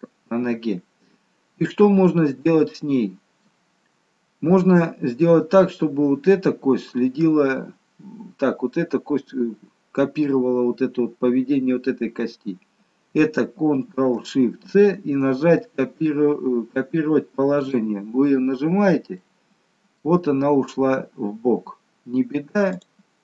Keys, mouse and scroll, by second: 0.0 middle click, 2.7 middle click, 12.4-12.9 scroll up 1, 12.9-13.5 scroll down 1, 19.3 middle click, 22.8 click.